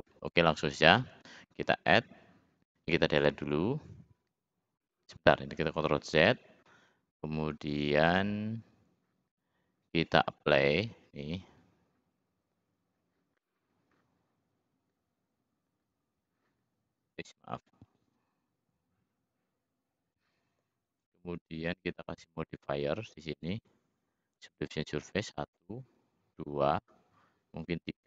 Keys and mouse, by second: 0.5 click, 3.2 Delete, 5.7 ctrl+z, 8.4 click, 9.3-11.0 drag, 21.9-23.0 drag, 27.5-28.0 middle drag.